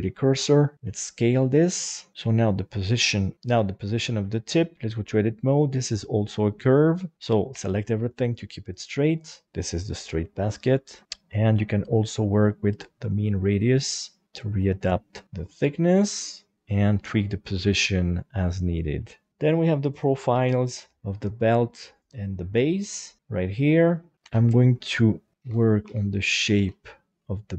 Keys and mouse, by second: 0.4 s, 1.5 click, 2.1 Tab, 2.2 right click, 3.6 Tab, 4.0 middle click, 4.7 middle click, 5.7 click, 7.1 ctrl+z, 7.5 a, 8.3 click, 10.8 middle click, 11.8-14.0 drag, 14.1-15.5 middle drag, 16.8 shift+middle click, 17.5-18.9 middle drag, 20.3 g, 21.8 right click, 22.0 g, 22.7 click, 23.1 middle click, 23.3 Tab, 23.5 middle click, 24.3 alt+a, 24.4 alt+z, 24.9 b, 25.6 alt+z, 26.1 click.